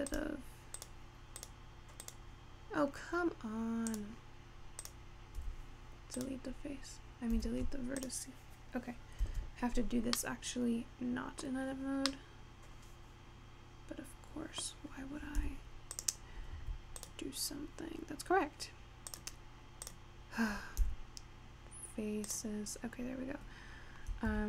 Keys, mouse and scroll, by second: 0.8 click, 1.5 click, 2.0 click, 4.0 click, 4.9 click, 5.4 x, 7.4 x, 9.4 Tab, 9.9-10.2 scroll down 2, 10.2-11.8 middle drag, 11.8-12.4 scroll up 4, 12.4-15.5 middle drag, 15.5 g, 16.7 Tab, 17.6 click, 19.4 click, 20.1 click, 21.1 x, 22.9-23.7 scroll down 4.